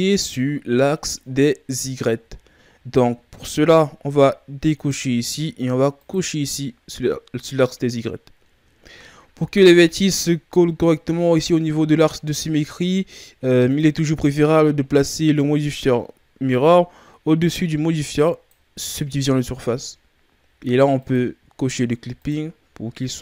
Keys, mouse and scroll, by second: 0.0-2.6 shift+scroll up 3, 2.6-3.4 scroll up 3, 3.4-4.7 shift+scroll down 4, 4.7 click, 5.9 click, 8.7-9.2 shift+scroll down 2, 9.2-10.2 scroll up 1, 10.2-12.6 scroll up 5, 13.6 click, 17.3 click, 20.9 click.